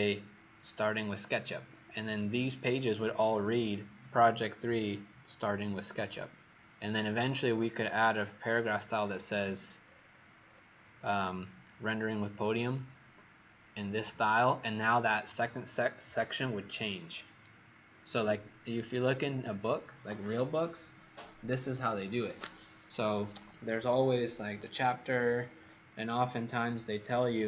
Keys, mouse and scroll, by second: 7.2-8.9 scroll down 14, 8.9-9.8 scroll up 7, 9.8-27.4 scroll up 24.